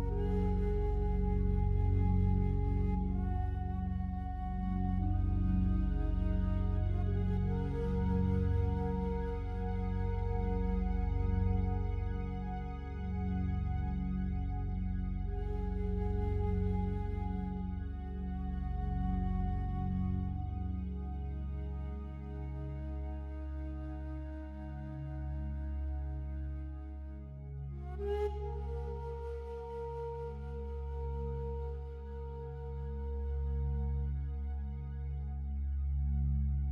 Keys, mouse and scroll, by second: 0.0-2.4 drag, 3.4 click, 3.7-7.0 drag, 7.3-9.9 typing, 10.7 Return, 13.2 click, 14.0 click, 14.0-14.5 typing, 17.6 middle click, 17.6-19.2 scroll down 4, 18.6-20.5 middle drag, 20.1-20.5 scroll down 4, 20.5-21.8 drag, 22.0 click, 25.4 click, 26.0 click, 30.6 click, 31.0 click, 31.6 click, 33.5 click, 33.7-35.0 drag, 36.4 click, 36.6-36.7 right drag.